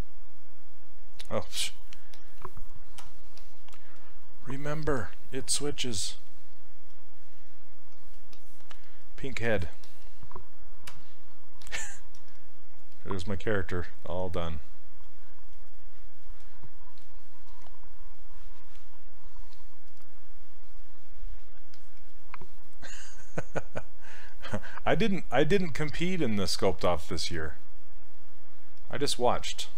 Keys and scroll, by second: 3.0 q, 10.9 w.